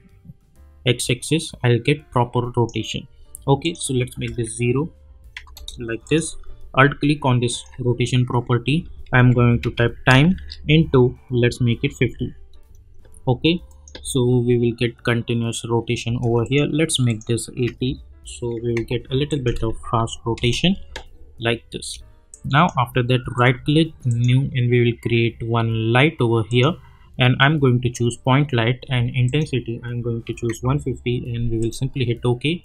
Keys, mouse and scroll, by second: 4.3 \, 5.5 Return, 6.0 click, 7.5 alt+click, 8.9-10.3 typing, 11.8 5, 13.7 click, 13.9 space, 16.0 space, 16.4 click, 19.2 click, 19.8 u, 20.3 space, 22.3 click, 23.3 right click, 24.1 click, 26.4 click, 29.2 click, 31.6 click.